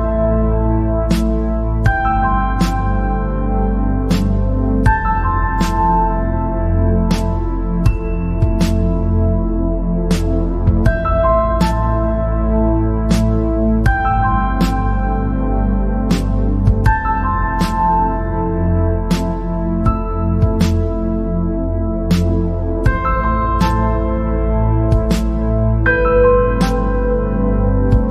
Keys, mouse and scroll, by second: 12.5-13.6 drag, 15.4-16.4 drag, 16.4 scroll down 4, 16.9 scroll up 3, 19.9 click, 20.7-21.0 scroll down 3, 21.0-21.5 scroll up 6, 21.9 scroll down 3, 22.3-22.7 scroll up 4, 22.7 scroll down 1, 22.9 middle click, 23.8 scroll up 3, 24.0 scroll down 3, 24.2-25.7 middle drag, 25.7-27.0 scroll down 4, 27.0-28.1 scroll down 1.